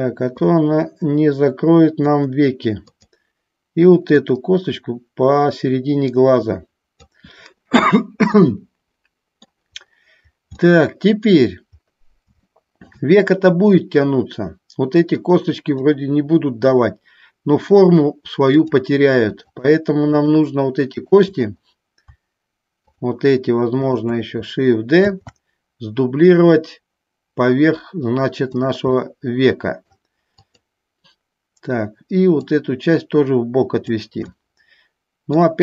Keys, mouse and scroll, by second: 0.5-2.3 drag, 4.5-7.1 drag, 8.5-9.6 middle drag, 10.9 middle click, 12.6 shift+middle click, 16.0-17.9 middle drag, 18.6 click, 19.6 shift+click, 20.4 shift+click, 21.0 shift+click, 22.9 shift+click, 23.9 shift+click, 25.1 shift+d, 28.7 click, 29.3 middle click, 30.7 click, 32.7-34.2 drag, 34.4-35.5 middle drag.